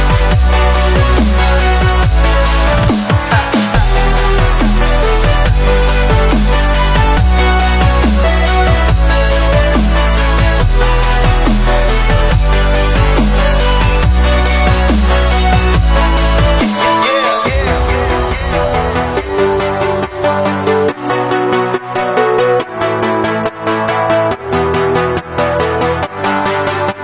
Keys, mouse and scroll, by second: 0.5-1.8 middle drag, 1.8 click, 2.0 scroll down 1, 2.1-3.3 middle drag, 3.3 shift+a, 5.3-5.8 drag, 5.8-6.6 middle drag, 6.6 KP_1, 7.4-9.0 drag, 9.4-9.8 middle drag, 9.8 scroll up 1, 9.9-10.5 middle drag, 10.5-11.0 drag, 11.0 middle drag, 11.3 s, 13.7 click, 14.3 middle drag, 14.6 scroll up 1, 14.6 scroll down 1, 14.8 shift+middle drag, 15.0-15.7 scroll up 2, 15.7 click, 16.0-16.9 middle drag, 16.9 s, 19.1 click, 19.5-20.0 middle drag, 20.0 scroll up 1, 20.2-20.6 middle drag, 20.6 s, 21.1-22.0 middle drag, 22.0 scroll up 1, 22.1 middle click, 22.6 Tab, 23.3 2, 23.6 click, 24.1 shift+middle click, 25.0 shift+click, 25.2-25.9 middle drag, 25.9 e.